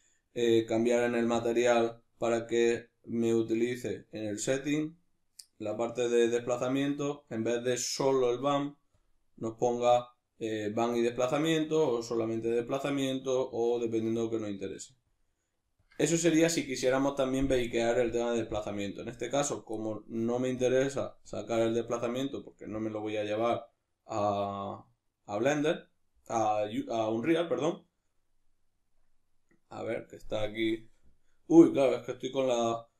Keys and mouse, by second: 1.4 drag, 1.4-4.6 middle drag, 4.6-12.9 drag, 12.9-15.1 middle drag, 15.1-20.7 drag, 20.7-21.3 middle drag, 21.3-32.9 drag.